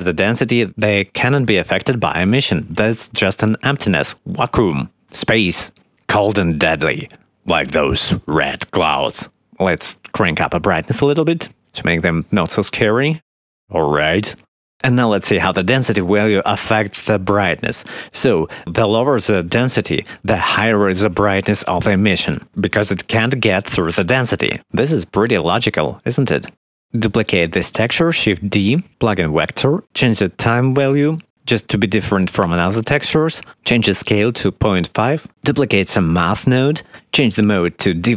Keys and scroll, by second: 0.6 5, 0.7 0, 0.9 Return, 9.0 x, 10.9 1, 11.0 Return, 20.2 1, 22.9 5, 23.0 Return, 24.0 ctrl+x, 27.8 shift+d, 31.2 3, 32.4 1, 32.9 5, 33.1 Return, 34.4 ., 34.5 5, 34.8 Return, 35.8 shift+d, 36.3 x, 36.8 shift+d.